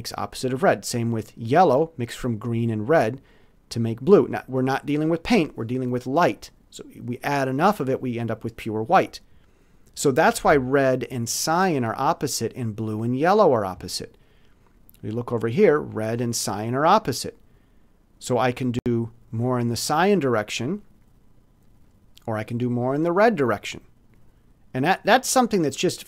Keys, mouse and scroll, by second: 13.9-15.0 alt+drag, 18.7 click, 21.8-23.1 drag.